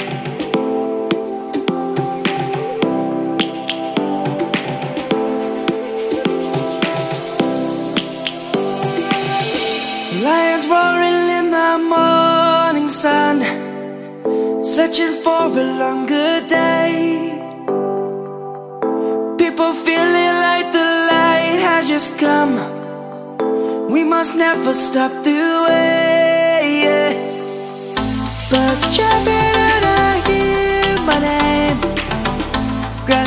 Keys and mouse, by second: 2.5 click, 3.4 middle click, 5.9 middle click, 7.4 e, 10.4 click, 10.7 middle click, 14.3 click, 15.4 middle click, 16.8 i, 21.4 middle click, 25.8 middle click, 31.2 middle click, 32.0 1.